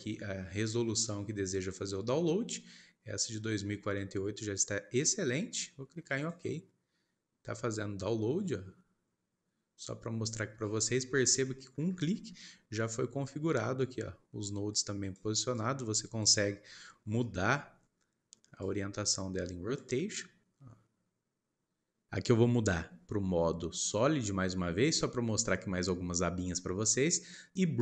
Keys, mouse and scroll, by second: 10.1-11.1 scroll down 15, 11.4 shift+middle click, 11.8 scroll up 1, 12.4-14.7 middle drag, 14.7 click, 15.5 click, 16.4-16.8 scroll up 10, 17.2-18.6 shift+middle drag, 18.6-22.2 drag, 22.2 middle click, 25.3 click, 26.1 scroll up 1, 27.5 click.